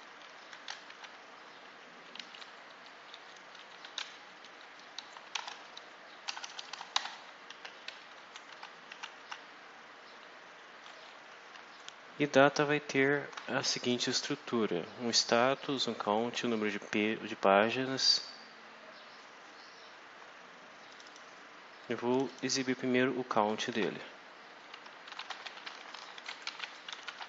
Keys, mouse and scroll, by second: 0.8 shift+Delete, 2.0 Up, 2.3 Left, 3.8 shift+End, 3.8 shift+Left, 5.2 ctrl+shift+c, 5.4 ctrl+shift+Down, 5.7 ctrl+shift+Left, 6.2 ctrl+shift+BackSpace, 6.8 ctrl+shift+v, 7.4 ctrl+shift+End, 7.8 Down, 8.4 Tab, 11.5 alt+Tab, 20.8 click, 22.0 click, 23.6 alt+Tab, 24.7-27.2 typing.